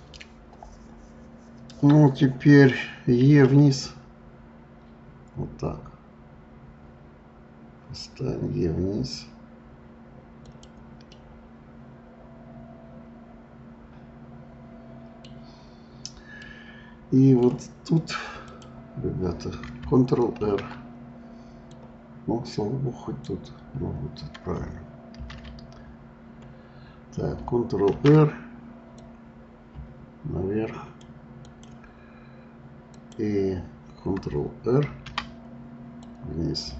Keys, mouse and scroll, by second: 11.1-14.1 middle drag, 16.4-17.4 middle drag, 17.4-18.3 scroll down 1, 18.3 scroll down 1, 18.5 click, 20.4 ctrl+r, 25.1 ctrl+z, 25.7-26.1 scroll up 2, 27.8 ctrl+r, 31.4 click, 32.9 click, 34.9 ctrl+r.